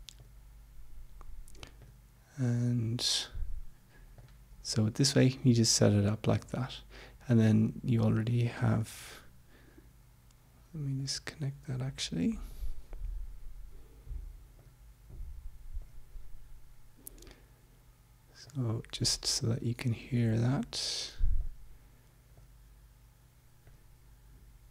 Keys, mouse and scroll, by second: 0.1 click, 1.9 click, 4.1 click, 8.1-9.2 drag, 11.1 click, 12.4 click, 14.5 click, 15.8 click, 18.4 click, 19.8 click, 21.5 click, 22.3 click, 23.6 click.